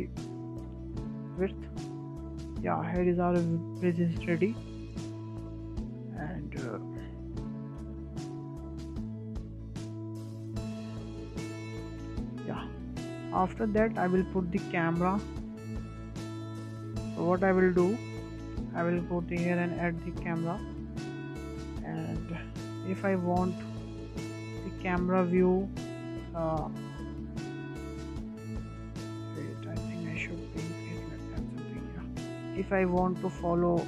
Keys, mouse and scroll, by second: 2.0 click, 2.3 scroll down 1, 2.5-3.2 middle drag, 3.2-3.7 scroll up 4, 3.7-5.5 middle drag, 5.5 scroll down 1, 5.7-6.0 scroll up 5, 6.0-7.4 shift+middle drag, 7.4 click, 9.7 click, 10.5-12.6 scroll down 4, 12.6 click, 13.0-13.4 scroll down 1, 13.4 shift+middle drag, 13.6-14.1 scroll up 5, 14.1-14.4 shift+middle drag, 14.4 scroll down 1, 14.7-15.0 shift+middle drag, 15.0-15.4 scroll up 2, 15.4-15.7 shift+middle drag, 15.7-16.1 scroll up 4, 16.1-16.5 shift+middle drag, 16.5-16.9 scroll up 2, 16.9-18.7 shift+middle drag, 18.7 shift+a, 21.3-21.9 scroll down 6, 21.9-22.3 scroll up 1, 22.3-23.3 shift+middle drag, 23.3-23.6 scroll up 4, 23.6-24.9 shift+middle drag, 24.9-25.3 scroll up 5, 25.3-25.6 shift+middle drag, 25.6 scroll up 1, 25.6 middle click, 26.6 scroll up 1, 26.8-28.0 shift+middle drag, 28.0 click, 29.4 click, 29.7 click, 30.6 s, 32.5-32.8 scroll down 2, 32.8-33.8 middle drag.